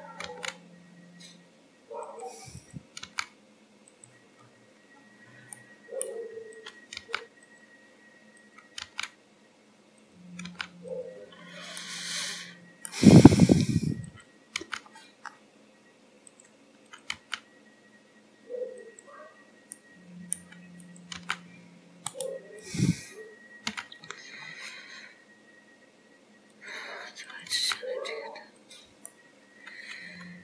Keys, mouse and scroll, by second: 0.4 g, 2.6 click, 3.1 g, 4.4 scroll up 3, 5.0-5.4 scroll down 2, 5.6 middle click, 6.6 click, 7.1 g, 8.5 click, 8.9 g, 10.6 g, 11.4-11.8 scroll down 2, 11.8 middle click, 13.3-14.1 scroll up 3, 14.1 click, 14.6 g, 16.9 click, 17.3 g, 19.8 middle click, 20.9 click, 21.2 g, 22.7 click, 23.8 g, 27.3 click, 27.7 g, 29.2 middle click.